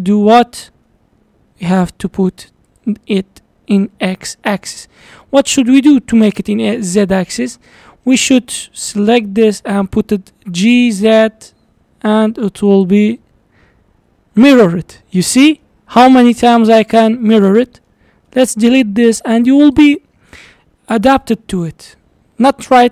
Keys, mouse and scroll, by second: 4.3-4.6 scroll down 1, 4.6-7.0 middle drag, 7.0 click, 7.4-7.8 scroll down 1, 7.8-10.5 middle drag, 10.5 g, 13.2-16.3 middle drag, 16.9 Tab, 17.2-18.3 middle drag, 18.3 x, 19.0-21.2 middle drag, 21.2 shift+a.